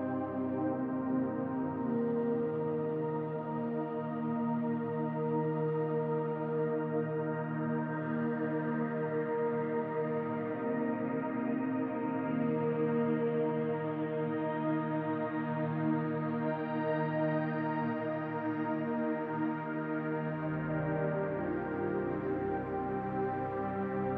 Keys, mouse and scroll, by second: 5.9 middle click, 6.6 Tab, 7.2 middle click, 8.9 scroll down 2, 9.3 shift+middle click, 9.7 middle click, 10.5 shift+middle click, 11.0 middle click, 11.6 middle click, 11.9 shift+middle click, 12.8 KP_7, 13.6 scroll down 1, 14.0 shift+middle click, 14.4 shift+middle click, 16.7 Tab, 17.3-19.6 scroll up 1, 19.9 shift+a, 22.4 click.